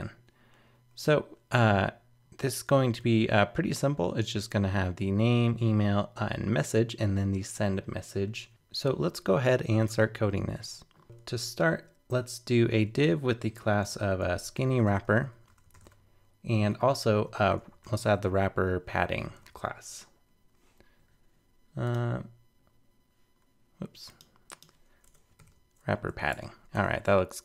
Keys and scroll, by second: 26.0 super+Right.